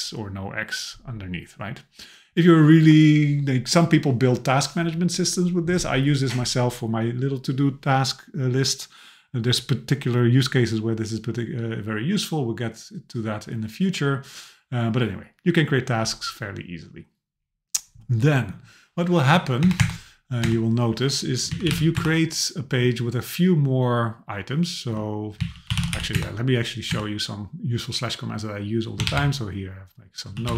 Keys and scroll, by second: 19.6 Return, 22.0 Return, 26.1 Return.